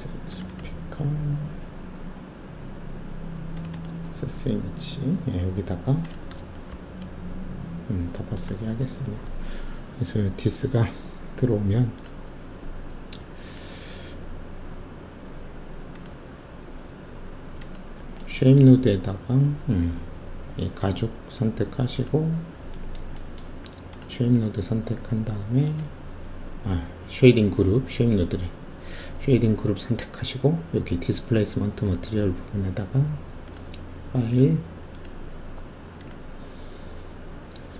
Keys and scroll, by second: 6.7 ctrl+v.